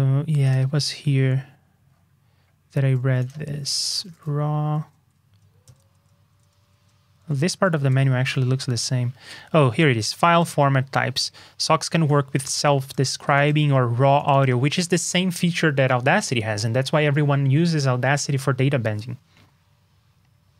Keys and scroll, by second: 3.4 super+f.